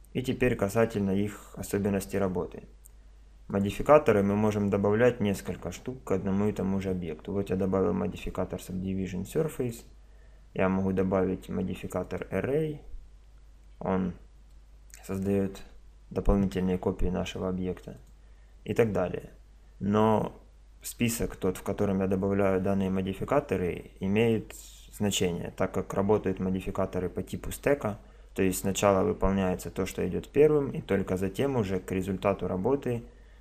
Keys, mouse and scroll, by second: 3.5 right click, 9.6-11.4 drag, 13.4-17.6 middle drag, 18.0-19.7 drag.